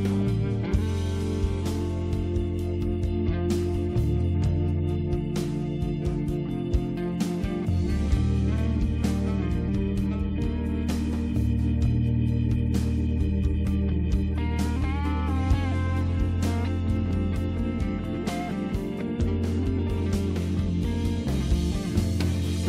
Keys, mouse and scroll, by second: 0.9 click, 1.8-2.3 scroll up 2, 3.9 right click, 8.1 click, 9.4 click, 9.5 click, 10.5 click, 13.8 Delete, 14.1 End, 14.9 space, 16.5-17.6 typing, 19.7 click.